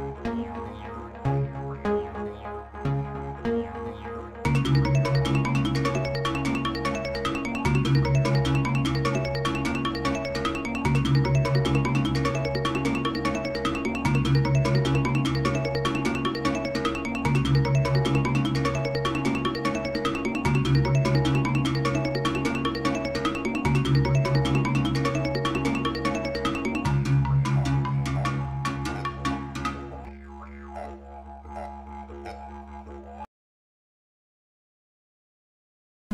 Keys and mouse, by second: 3.3 click, 4.4 click, 5.4-13.0 drag, 13.4 space, 17.7 space, 22.2-27.1 right drag, 28.7 space.